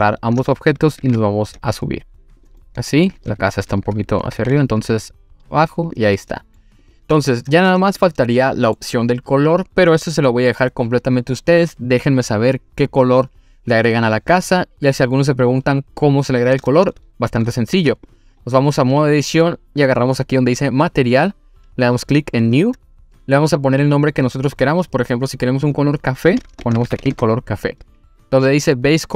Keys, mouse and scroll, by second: 0.0 shift+click, 1.0 g, 2.4 click, 2.6-3.1 middle drag, 3.3 click, 4.3 g, 4.4 z, 5.9 click, 6.2-6.6 middle drag, 6.8 click, 7.2 scroll down 1, 7.5-8.0 scroll up 2, 8.0-8.8 middle drag, 16.9-17.4 shift+middle drag, 17.7 Tab, 18.1 click, 18.4-18.9 scroll up 2, 18.9 click, 20.7 click, 22.4 click, 25.6-27.1 drag.